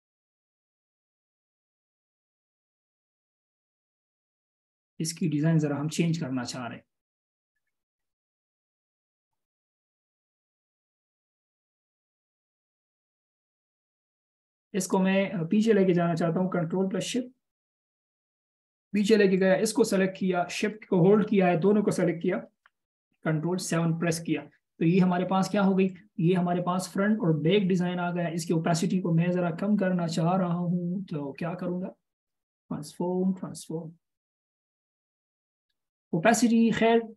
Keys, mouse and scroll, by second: 9.3 double click, 17.5 ctrl+shift+[, 20.9 shift+click, 23.7 ctrl+7.